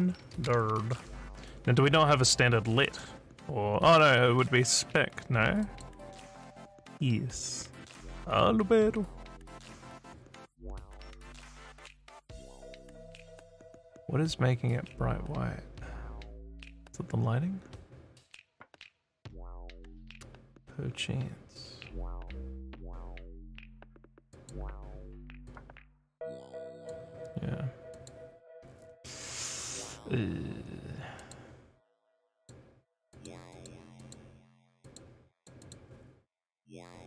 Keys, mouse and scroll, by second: 0.0-1.3 typing, 5.6 click, 11.5 s, 24.3 click, 25.5-26.9 drag, 27.9 click, 31.2 click, 32.3 click, 33.1 click, 33.5 click, 34.0 click, 34.8 click, 35.4 click, 35.6 click.